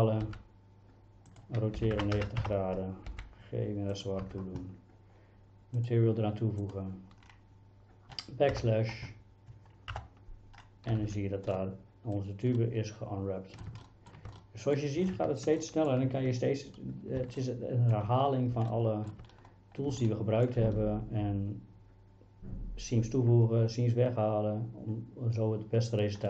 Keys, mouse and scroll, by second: 0.3 s, 1.8 r, 2.0 KP_9, 2.2 KP_0, 2.4 KP_Enter, 3.1 g, 4.3 Tab, 5.9 click, 10.0 KP_Divide, 11.0 a, 11.1 a, 11.6-12.2 middle drag, 12.6-13.6 middle drag, 13.9 shift+middle drag, 14.4-14.8 middle drag, 15.6 shift+middle drag, 17.4-18.0 shift+middle drag, 18.8 shift+middle click, 20.1-20.5 shift+middle drag.